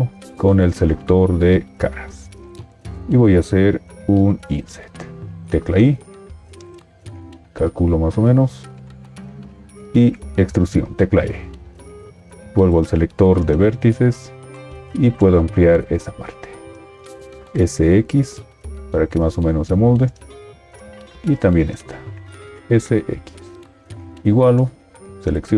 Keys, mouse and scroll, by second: 5.4 i, 9.8 e, 17.4 s, 22.7 s.